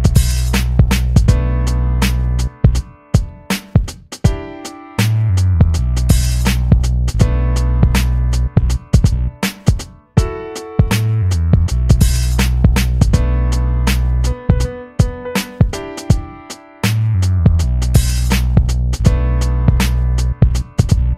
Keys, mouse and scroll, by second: 1.3 click, 2.3 space, 2.5 click, 2.8 space, 3.6 click, 4.2 space, 4.3 click, 4.7 space, 5.7 click, 5.7-9.2 drag, 10.3-14.1 alt+drag, 14.1-17.7 drag, 17.7-21.1 drag.